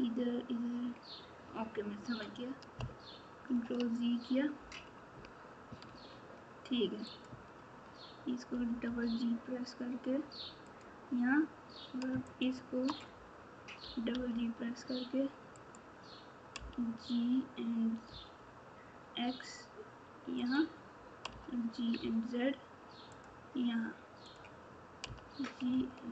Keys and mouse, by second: 3.4 ctrl+z, 5.8 Tab, 7.0 click, 8.5 g, 12.2 shift+click, 16.5 g, 21.3 g, 24.2 click.